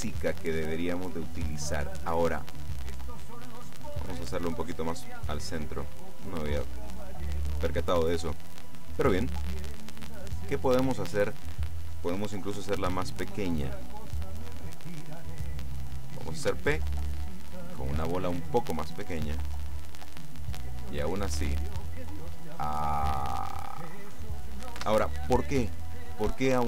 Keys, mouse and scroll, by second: 2.3-4.3 middle drag, 4.8-6.0 drag, 6.0-6.6 scroll up 1, 7.3 middle click, 8.3 middle click, 9.0 middle click, 9.7 middle click, 12.8 s, 14.0 click, 16.5 p, 24.8 Escape.